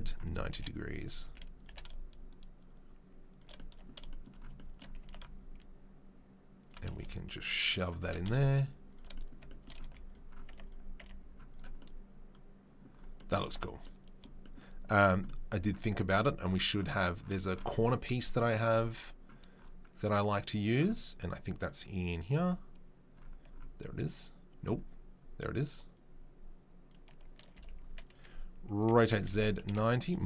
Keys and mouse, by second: 0.5 g, 1.2 s, 1.6 g, 5.0 s, 6.9 g, 8.0 g, 9.8 z, 10.5 Tab, 10.6 click, 10.6 right click, 11.0 Tab, 25.5 right click, 25.9-27.0 right drag, 27.6 s, 28.8 r.